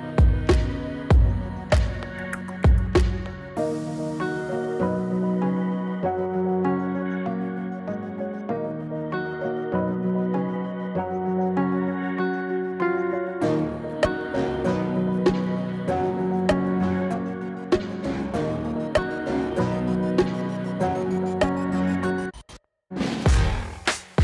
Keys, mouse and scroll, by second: 2.6-3.6 drag, 4.2 space, 9.2 space, 10.5-11.4 drag, 15.3 scroll down 1, 18.8 click, 21.3-24.2 typing.